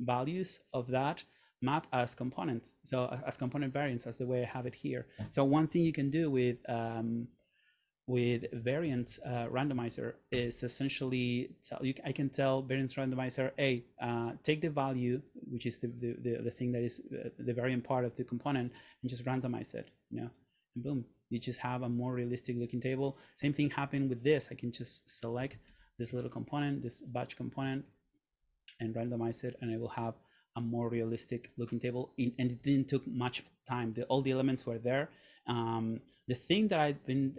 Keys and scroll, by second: 6.0 super+/, 8.1-10.3 typing, 10.4 Return, 26.0 shift+Return.